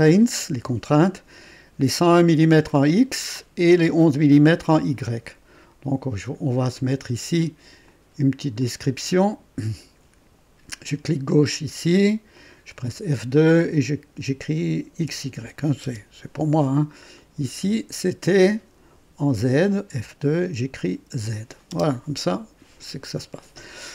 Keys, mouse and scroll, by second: 7.8 click, 8.5 click, 12.3 click, 12.8 F2, 14.9-15.8 typing, 17.1 click, 19.8 F2, 20.9-23.2 typing.